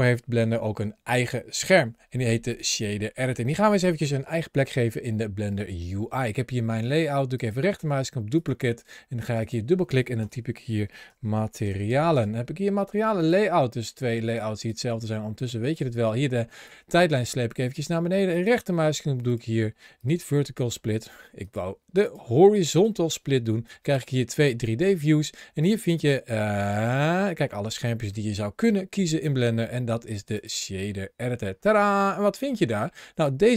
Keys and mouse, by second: 7.4-8.3 right drag, 9.1-12.0 drag, 13.0 click, 14.1 click, 15.6 click, 18.2-19.8 right drag, 21.3-22.7 right drag, 23.5 click, 25.4-30.3 drag, 31.5 middle click, 33.1 click.